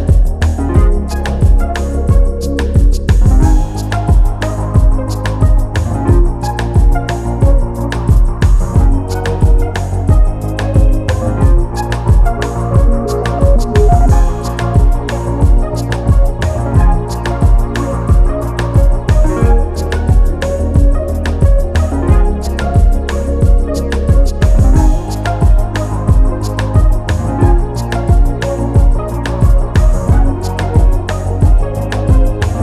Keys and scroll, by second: 6.5 ctrl+s, 18.5 Return, 19.2 alt+Return, 27.1 ctrl+t, 27.8 ctrl+alt+t.